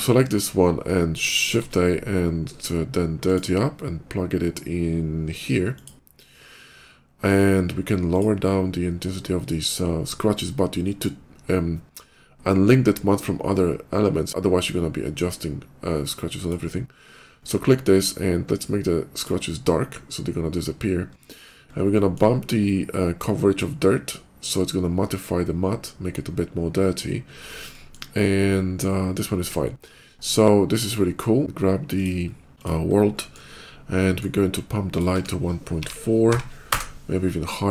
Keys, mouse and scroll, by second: 0.3 ctrl+middle click, 1.3 shift+a, 3.1 click, 5.6 click, 7.9 click, 9.2 middle click, 10.6 middle click, 16.2 click, 17.7 click, 18.9 click, 21.0-21.6 scroll down 3, 21.1 middle click, 21.5 middle click, 21.7 middle click, 22.2 middle click, 23.0-24.2 drag, 23.0 middle click, 27.3 middle click, 27.5 middle click, 27.9 middle click, 29.1 middle click, 29.5 middle click, 31.6 click, 32.0 middle click, 32.0 scroll up 1, 32.6 middle click, 32.6 scroll up 1, 32.9 middle click, 33.3 scroll up 1, 33.9 middle click, 34.7 click, 35.0 1, 35.5 ., 36.1 4, 36.5 Return.